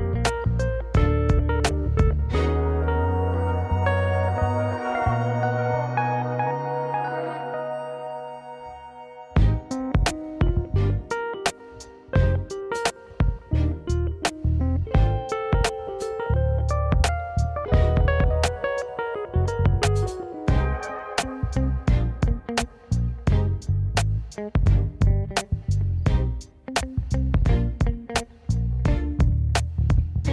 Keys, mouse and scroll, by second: 0.6 ctrl+b, 3.2 click, 3.5 click, 3.7-5.0 middle drag, 5.5 Tab, 5.7 click, 6.1 middle click, 6.4 scroll up 1, 6.7-7.0 scroll down 2, 7.0-8.5 middle drag, 8.5 scroll down 2, 8.7-10.0 middle drag, 10.0 click, 11.1 g, 12.9 drag, 13.1 click, 17.2 shift+a, 19.2-20.2 scroll up 1, 20.2 s, 20.9-22.4 scroll up 4, 23.1 g, 24.2 right click, 27.2 s, 29.5 Tab, 30.2 ctrl+r.